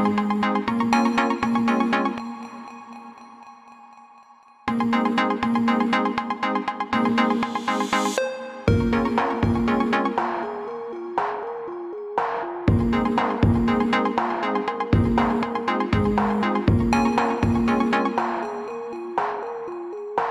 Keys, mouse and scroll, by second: 0.4-0.9 alt+scroll down 2, 2.3 click, 4.9-5.4 scroll down 2, 6.6 click, 7.4 scroll up 1, 7.5 scroll down 1, 8.9 scroll up 1, 10.1 click, 13.5 click.